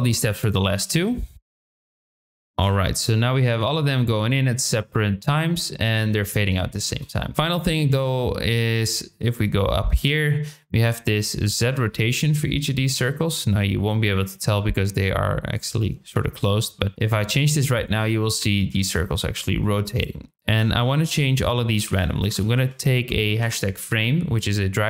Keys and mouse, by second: 0.0 click, 0.0-2.4 typing, 0.2 click, 0.4 middle click, 0.5 click, 1.1 click, 1.5 click, 1.6 click, 1.9 drag, 6.8 space, 7.3 shift+middle click, 8.7 click, 11.6-13.0 drag, 15.6 click, 16.9-20.0 drag, 20.3-24.8 drag.